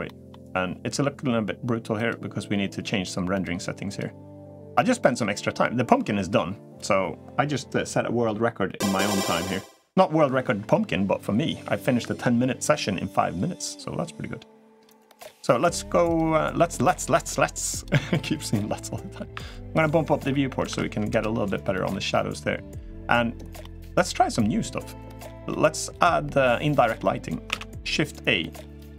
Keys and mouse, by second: 20.5-21.4 drag, 23.4-24.1 middle drag, 25.2-26.2 middle drag, 26.6 middle click, 27.3 shift+a.